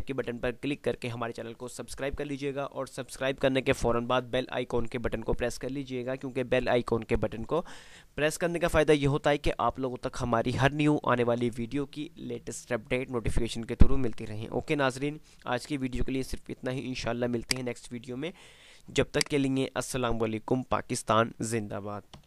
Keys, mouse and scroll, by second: 17.6 click.